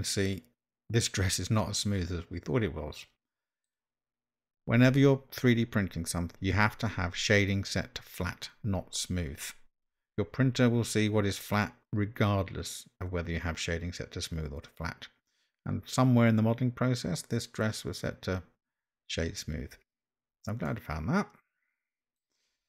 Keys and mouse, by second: 20.7-22.2 middle drag.